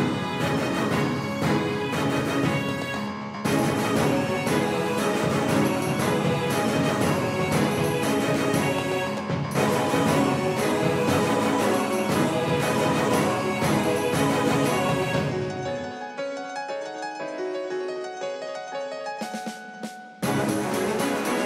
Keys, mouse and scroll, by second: 18.2-20.8 middle drag, 20.8-21.4 right drag.